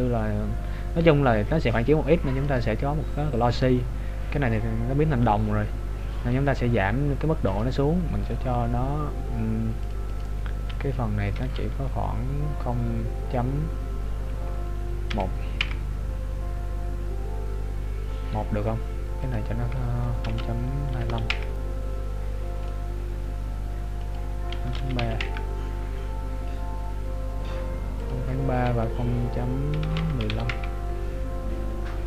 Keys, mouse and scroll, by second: 3.3-3.9 scroll down 1, 3.9-4.4 scroll down 2, 7.6 click, 19.3 click, 23.1 click, 28.0 click.